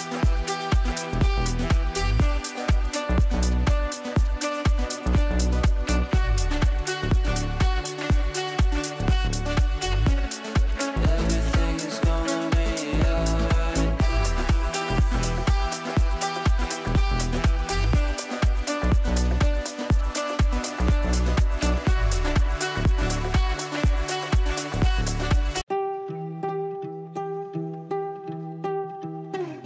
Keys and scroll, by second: 10.0 Down, 10.9 f, 22.8 shift+F2, 23.3 shift+Page_Down, 23.8 Escape.